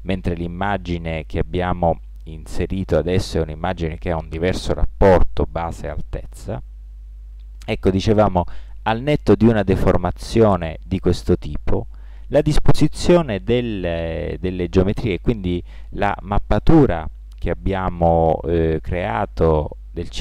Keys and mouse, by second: 15.4-20.2 middle drag.